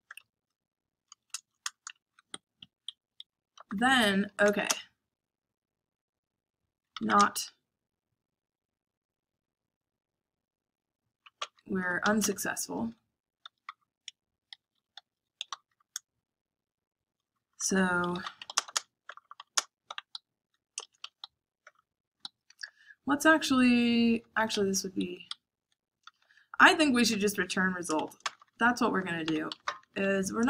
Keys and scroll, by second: 1.1 space, 1.3 shift+[, 1.6 Return, 1.9 shift+], 3.1 Escape, 3.3-4.6 typing, 5.9-7.5 typing, 11.3-16.1 typing, 17.4-19.7 typing, 20.7-24.6 typing, 22.1 Escape, 25.2 Escape, 25.7-30.4 typing.